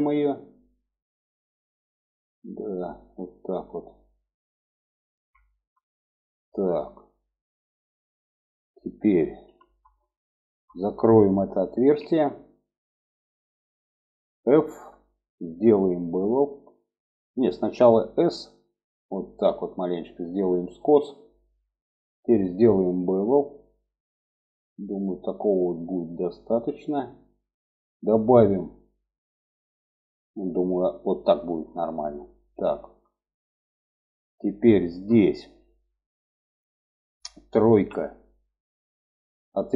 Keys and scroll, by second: 9.4 2, 11.7 alt+z, 14.7 f, 18.1 s, 37.7 3.